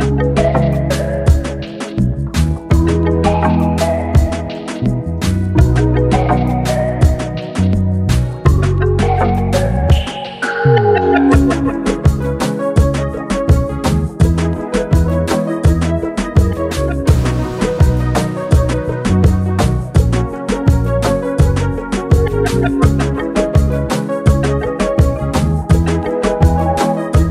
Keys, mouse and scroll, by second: 0.0-4.7 typing, 6.4-9.7 typing, 9.8 click, 11.4 click, 13.0 Return, 14.0 click, 15.4 scroll down 1, 18.1 Down, 19.1 Down, 20.8 Up, 21.7 Down, 22.6-27.3 drag.